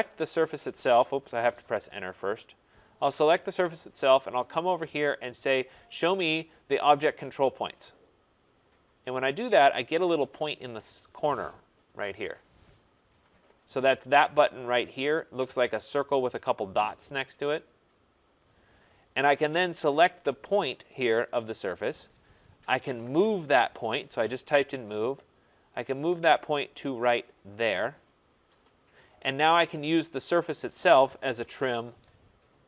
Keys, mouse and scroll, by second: 1.2 Return, 2.5 click, 7.1 click, 10.2 click, 22.3-23.4 typing, 25.1 click, 27.5 click, 29.8 click, 30.8-32.0 typing.